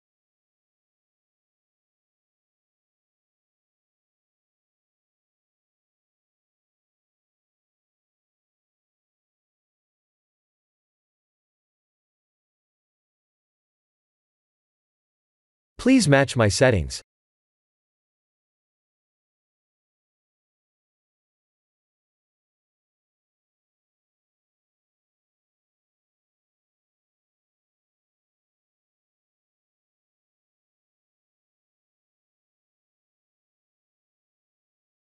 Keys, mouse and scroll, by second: 2.7 ctrl+a, 7.4 shift+a, 11.6 click, 13.9 click, 14.8 click, 16.7 click, 17.5 click, 17.8 click, 20.9 click, 21.3 n, 22.9 click, 24.5 click, 27.9 click, 33.4 click.